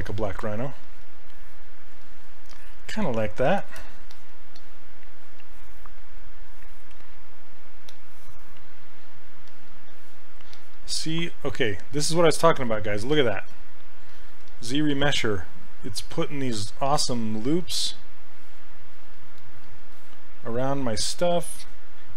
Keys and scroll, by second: 3.6 shift+f, 14.5 s.